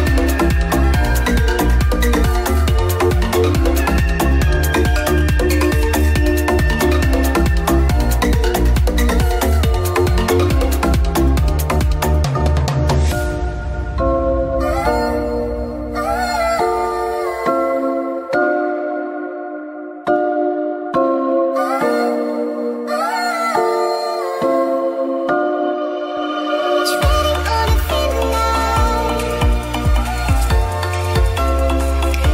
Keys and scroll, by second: 0.0 ctrl+d, 0.2 b, 2.8 [, 4.5 space, 6.1 space, 7.0 space, 7.9 [, 8.1 ctrl+s, 9.8 space, 11.4 ], 12.9 space, 13.8 space, 14.7 ctrl+z, 15.3 space, 15.8 [, 17.4 space, 19.6 space, 23.7 space, 25.5 space, 30.2 ctrl+s, 31.6 space, 31.9 [.